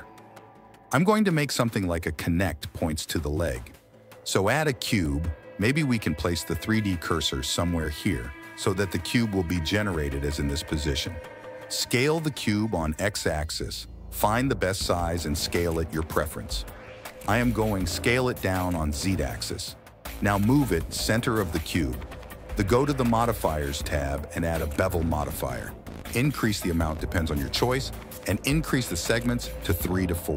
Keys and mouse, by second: 0.4 click, 0.8 ctrl+a, 1.7 click, 2.7 click, 4.1 shift+a, 6.1 x, 6.5 KP_1, 7.7 shift+a, 9.2 s, 11.1 s, 13.0 g, 15.2 g, 16.7 s, 18.0 s, 20.6 g, 23.6-25.6 drag, 26.6 click, 27.4 click, 29.6 shift+click.